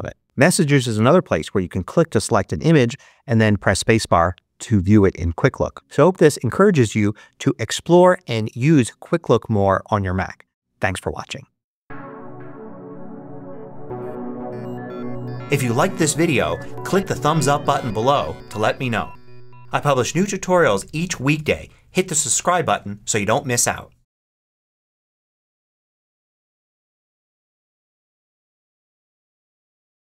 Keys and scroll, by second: 0.2 space, 2.9 space.